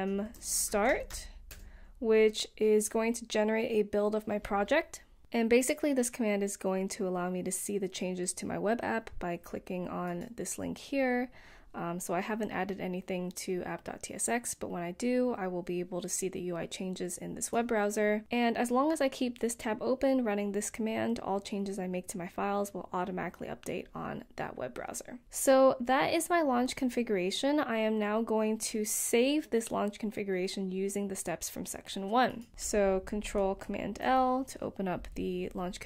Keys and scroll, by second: 0.0-1.9 typing, 4.2 typing, 5.7 typing, 35.6 ctrl+super+l.